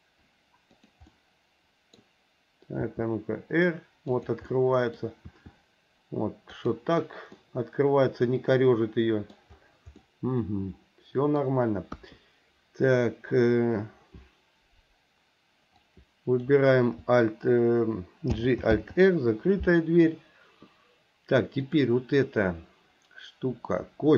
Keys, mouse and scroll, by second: 1.2 middle click, 2.8 r, 4.5 middle click, 5.2 r, 7.4-9.4 middle drag, 10.1-11.5 middle drag, 12.0 KP_1, 15.8 click, 18.4 alt+g, 18.7 alt+r, 21.6 click.